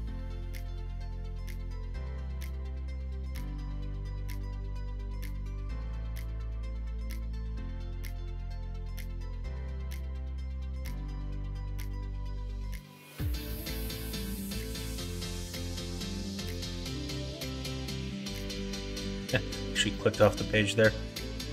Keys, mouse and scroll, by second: 1.0 g, 2.3 g, 9.7 e, 12.8 g, 14.6 s.